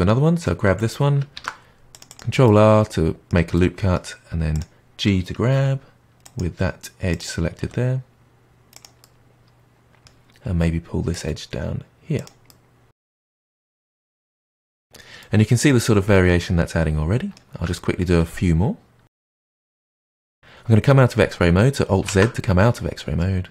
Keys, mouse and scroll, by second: 1.3 ctrl+r, 2.4-4.5 middle drag, 4.5 click, 5.5 g, 7.0 click, 7.6 g, 9.0-11.1 middle drag, 11.1 click, 12.1 click, 12.4-13.0 middle drag, 13.0 click, 13.2 middle click, 13.4 g, 14.0 middle click, 14.7 Tab, 14.8-15.7 scroll down 2, 15.7-18.4 middle drag, 18.4-19.0 scroll up 1, 19.0 middle drag, 19.3 click, 20.0 Tab, 22.0 alt+z, 22.7-23.5 middle drag.